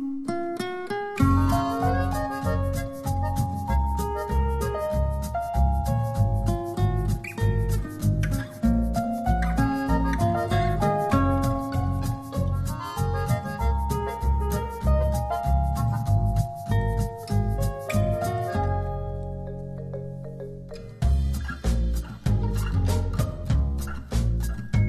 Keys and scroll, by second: 5.8 super+z, 6.5 shift+super+z.